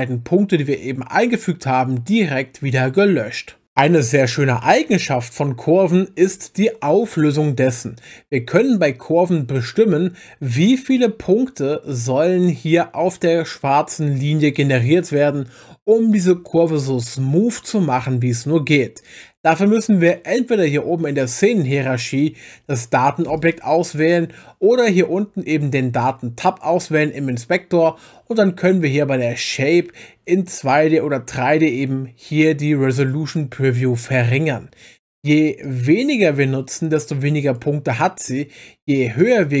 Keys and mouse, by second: 21.5 click, 23.3 click, 35.6-37.7 drag, 39.2 click.